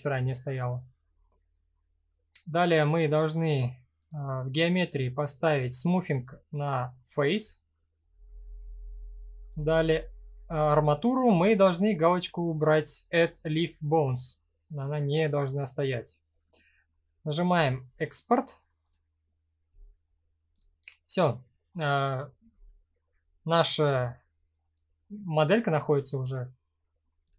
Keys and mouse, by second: 20.1 click, 24.3-24.9 drag.